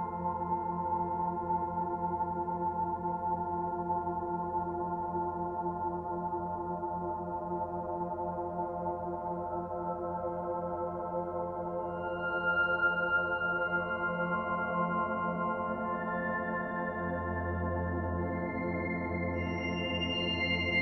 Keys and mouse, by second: 0.5-1.3 typing, 0.8-6.0 alt+shift+drag, 6.0-6.7 typing, 7.2 click, 7.9-8.9 typing, 8.9 click, 9.9 click, 11.3 alt+click, 14.6 click, 15.2-15.9 typing, 16.4 click, 16.8 click, 18.2-19.3 typing, 19.9 click.